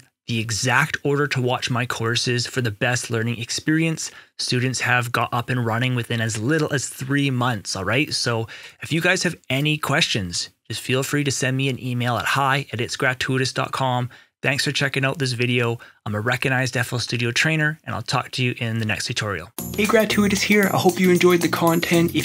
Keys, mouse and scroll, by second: 9.1 ctrl+right click, 9.4 ctrl+right click, 10.2 Return.